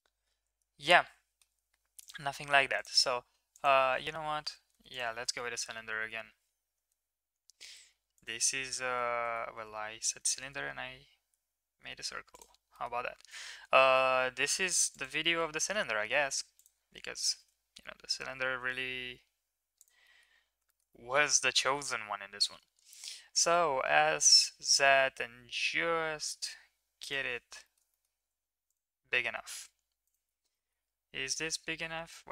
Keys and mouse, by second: 4.7 x, 5.3 shift+a, 9.1 ctrl+z, 10.4 shift+a, 13.3 s, 15.4 middle click, 15.7 s, 20.2 middle click, 20.8 shift+middle click, 20.9 middle drag, 21.7-22.5 middle drag, 23.7 s, 27.6 shift+middle drag, 28.2 s, 29.2 s, 30.6 shift+middle click, 32.1 Tab.